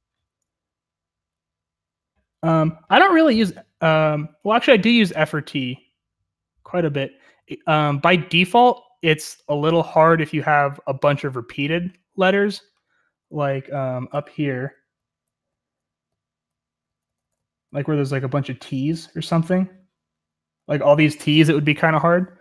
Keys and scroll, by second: 0.0-18.7 typing.